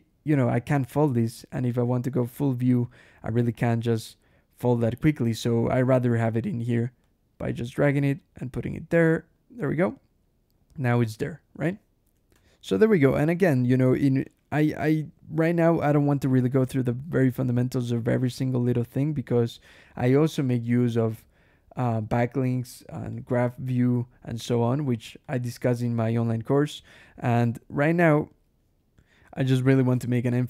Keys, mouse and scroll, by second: 3.4 alt+h, 5.7 ctrl+shift+h, 6.9-9.4 drag, 10.4 scroll up 1, 11.5 click, 12.2 \, 13.5-13.9 scroll down 1, 14.7 scroll down 1, 16.7-17.2 scroll up 1, 17.9 ctrl+click, 18.2 ctrl+shift+l, 20.2 click, 23.0 click, 25.1-26.1 drag, 26.5 click, 28.0 scroll down 1, 28.8 \, 29.9 ctrl+shift+l.